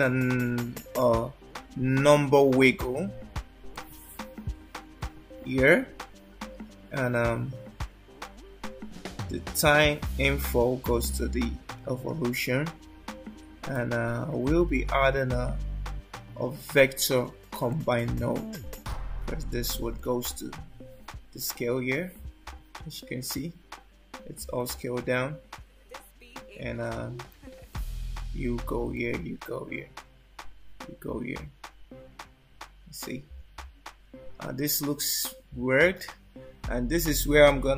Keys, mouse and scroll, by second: 9.7 click, 14.5 shift+a, 20.0 click, 21.1 click, 26.5 click, 27.7 click, 29.0 click.